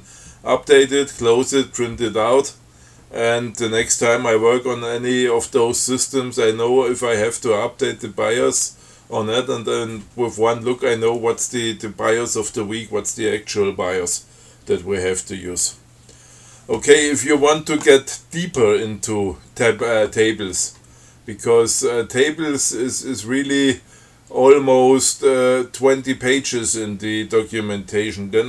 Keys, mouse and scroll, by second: 28.2-28.4 scroll down 6.